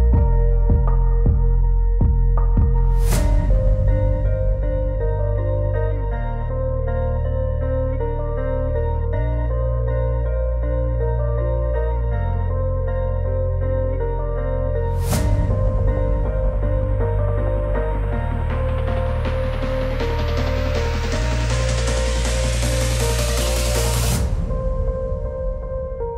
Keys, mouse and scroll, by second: 4.1 click, 5.4 click, 10.0 click, 13.1 click, 14.5 click, 15.9 click, 17.0 click, 18.4 click, 19.9 click, 20.7 click, 22.1 click, 23.6 click, 24.8 click, 25.6 click.